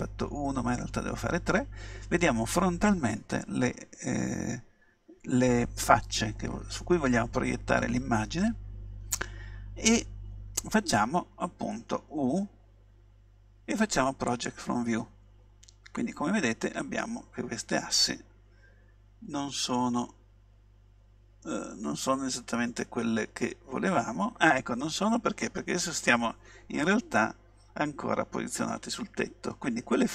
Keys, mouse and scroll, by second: 0.9 KP_3, 12.8 u, 14.4-15.8 drag, 17.7 middle click, 20.2-22.5 middle drag.